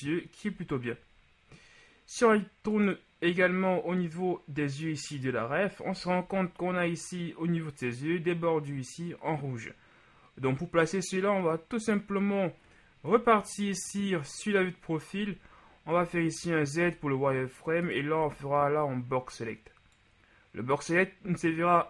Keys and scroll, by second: 0.5 KP_1, 13.1 KP_8, 16.1 Tab, 16.9 z, 18.2 b.